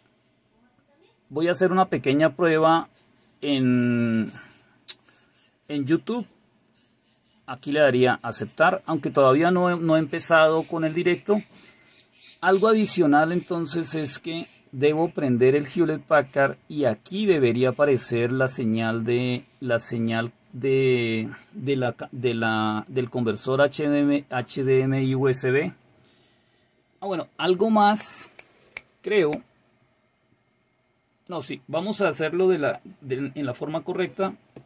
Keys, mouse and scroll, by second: 7.5 click.